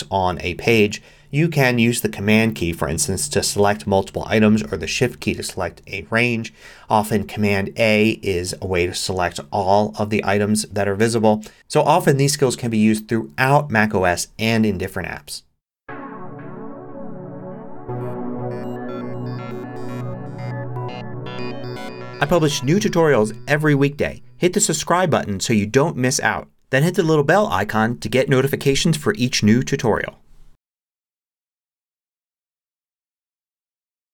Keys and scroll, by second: 1.1 typing.